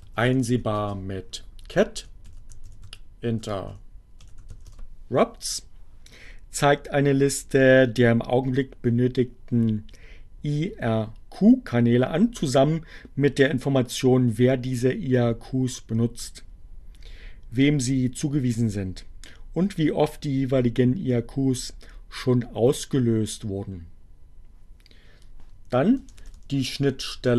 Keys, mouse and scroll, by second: 0.5-4.5 typing, 4.7 Return, 23.6 Up, 26.7 BackSpace.